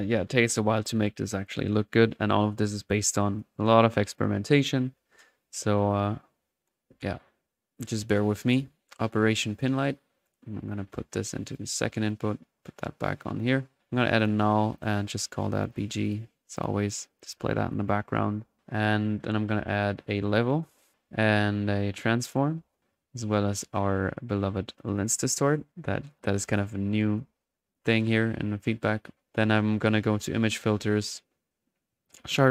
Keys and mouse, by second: 0.0-0.9 typing, 0.9 click, 1.5 click, 2.9 drag, 3.2-3.6 drag, 3.9-4.8 drag, 5.6 click, 8.5 click, 9.5 click, 9.7 click, 10.7-11.7 drag, 12.1-13.7 drag, 14.1 alt+n, 14.2-15.4 alt+drag, 15.5-16.3 alt+drag, 16.5-17.4 drag, 17.4 click, 20.0-20.4 right drag, 20.2-23.5 typing, 20.4 click, 21.9-22.2 right drag, 22.2 click, 23.5 right click, 24.7-27.3 drag, 27.3-27.8 middle drag, 27.8 click, 28.2 middle click, 29.2 middle click, 30.9-31.8 middle drag, 32.1 click.